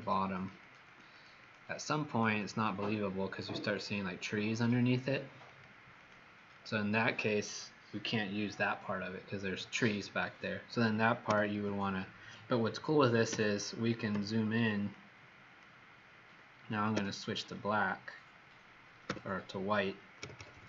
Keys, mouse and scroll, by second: 0.3 click, 0.6 click, 0.8 click, 1.1 click, 1.4 click, 1.8 click, 2.0 click, 2.3 click, 5.4 click, 5.9 click, 6.4 click, 11.2 ;, 11.4 l, 13.2 b, 14.0 z, 14.8 click, 16.9 b, 19.0 x, 20.1-20.6 typing.